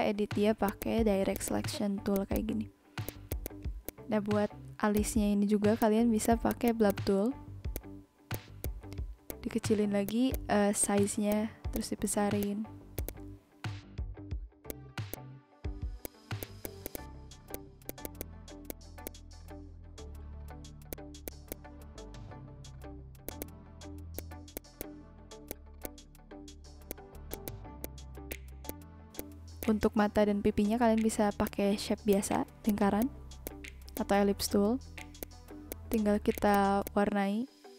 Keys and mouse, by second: 0.1 click, 0.6 click, 0.9 Up, 1.1 Down, 1.3 click, 1.7 Left, 1.9 Right, 2.1 click, 2.5 Up, 2.6 Left, 2.8 Down, 2.9 Up, 3.0 click, 4.9 click, 5.8 click, 6.4 click, 7.7 click, 8.3 click, 9.2 click, 10.0 click, 10.8 click, 11.3 click, 11.7 click, 12.4 click, 12.9 click, 13.6 b, 13.7 click, 14.4 click, 15.1 click, 15.5 ctrl+z, 16.0 click, 16.2 ctrl+z, 16.4 click, 17.5 click, 17.7 ctrl+z, 17.8 click, 18.6 click, 19.0 click, 20.1 click, 20.6 ctrl+z, 20.9 click, 21.2 click, 21.4 ctrl+z, 21.5 click, 22.4 click, 22.6 ctrl+z, 23.1 click, 24.1 click, 24.8 click, 24.9 ctrl+z, 25.1 click, 25.5 click, 25.8 click, 26.5 v, 26.9 click, 27.3 click, 28.1 v, 28.3 click, 28.6 shift+click, 29.2 shift+click, 29.6 shift+click, 31.0 ctrl+c, 31.4 click, 32.1 click, 33.0 click, 33.4 click, 33.9 click, 34.4 ctrl+z, 35.2 click, 35.7 click, 36.3 click.